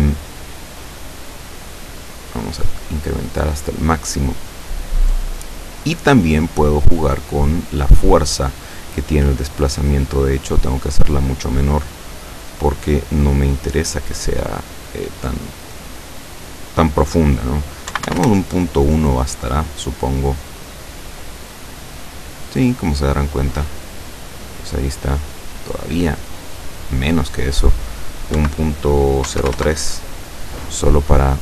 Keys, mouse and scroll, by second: 1.7 click, 2.1 click, 5.5-5.9 scroll down 1, 6.0-7.2 middle drag, 7.9 middle click, 10.0-11.6 drag, 13.4-15.3 middle drag, 15.9 click, 18.0 KP_Decimal, 18.2 KP_1, 18.2 Return, 20.5-21.7 middle drag, 21.7-22.2 scroll up 2, 22.2-26.0 middle drag, 26.7 click, 28.4-30.0 typing, 31.2-31.4 scroll down 2.